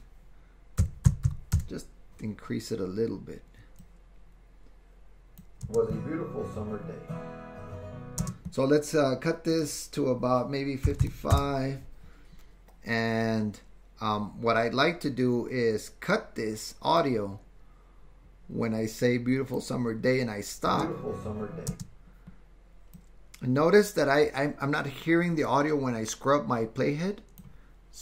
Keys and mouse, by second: 3.9-8.3 drag, 5.6 space, 8.2 space, 9.5-12.0 drag, 11.0 KP_5, 17.1-19.7 drag, 20.7 space, 21.7 space, 23.1-27.5 drag.